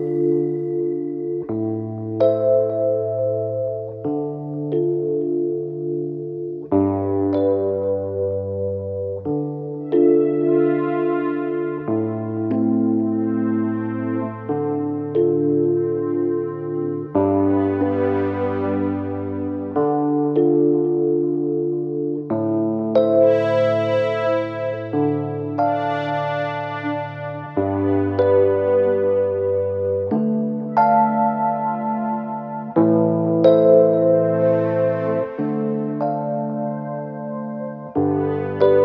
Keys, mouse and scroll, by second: 1.0 ctrl+c, 2.2 click, 3.6 ctrl+v, 11.2 ctrl+click, 13.6 click, 21.2 ctrl+click, 23.9 Right, 24.4 Right, 24.8 Right, 25.2 typing, 27.9 shift+Right, 28.3 shift+Right, 28.7 shift+Right, 30.4 Down, 30.7 typing, 33.5 click.